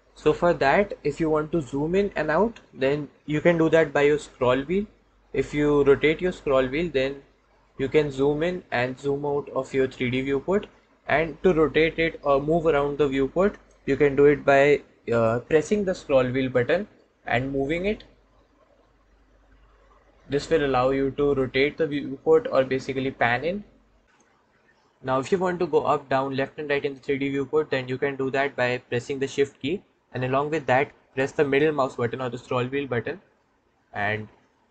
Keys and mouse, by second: 16.4-24.0 middle drag, 33.2-34.7 shift+middle drag.